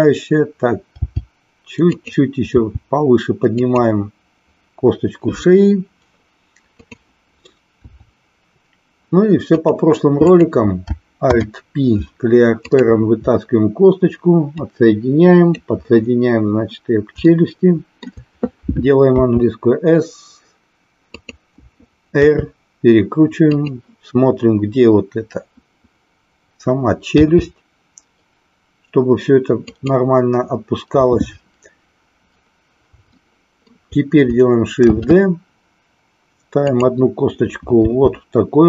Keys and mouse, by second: 0.9 g, 2.0 click, 2.7 g, 3.6 click, 6.7 click, 7.8 e, 9.4 click, 10.2 click, 11.2 alt+p, 14.6 click, 17.2 shift+middle click, 19.1 s, 22.1 r, 23.6 click, 27.1 g, 29.8 click, 33.1 shift+middle click, 34.8 shift+d, 37.8 r.